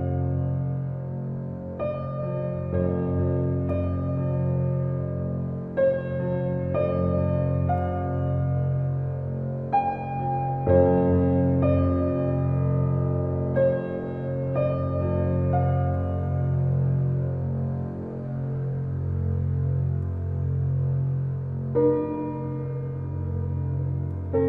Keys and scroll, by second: 13.9 ctrl+j, 18.0 ctrl+t.